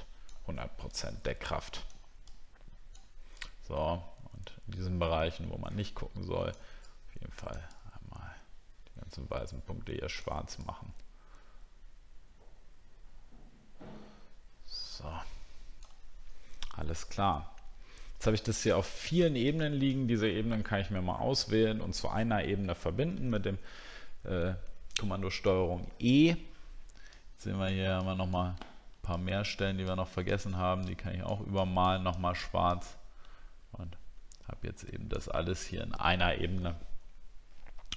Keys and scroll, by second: 23.3 ctrl+e.